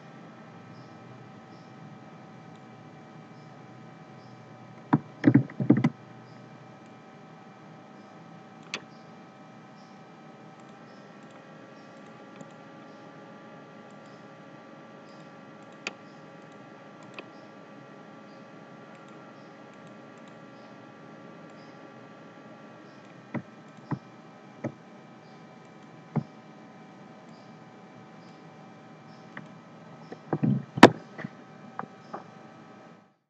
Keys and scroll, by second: 5.3 ctrl+c, 5.6 ctrl+f.